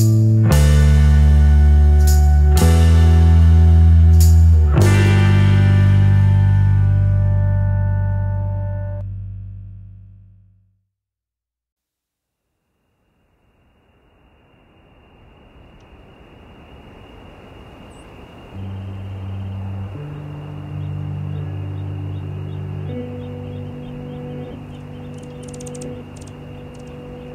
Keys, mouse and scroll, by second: 3.4 shift+click, 3.7-7.2 shift+drag, 7.4 shift+click, 8.2 shift+click, 9.1-11.2 shift+drag, 11.7-14.5 shift+drag, 14.6-15.7 shift+drag, 16.4 shift+click, 17.7 shift+click, 19.6 shift+click, 20.4 shift+click, 21.6 shift+click, 22.8 shift+click, 23.5-27.3 shift+drag.